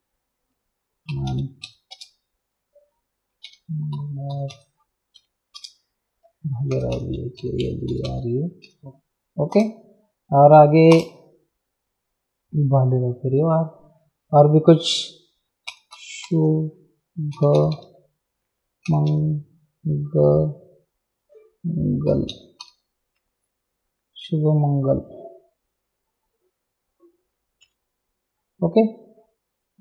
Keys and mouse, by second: 0.0-2.1 typing, 3.4-8.6 typing, 9.5 Return, 10.9 Return, 10.9 KP_Enter, 15.4-19.6 typing, 21.8-23.1 typing, 27.6 Return.